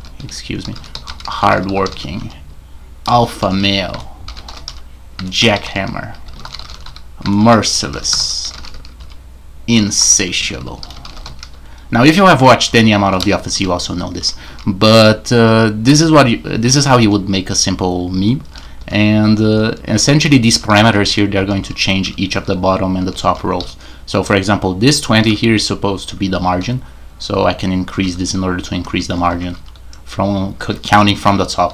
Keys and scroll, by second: 0.0-31.7 typing.